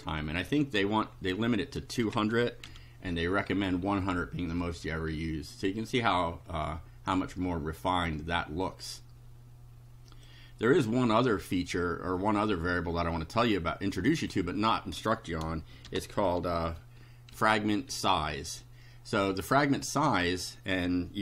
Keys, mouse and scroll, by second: 0.5 1, 1.0 Delete, 1.4 KP_0, 2.7 F5, 4.8 scroll up 2, 6.5 scroll down 2, 10.1 click, 12.2-13.6 drag, 14.2 click, 15.9 shift+4, 17.4 f, 17.9 s.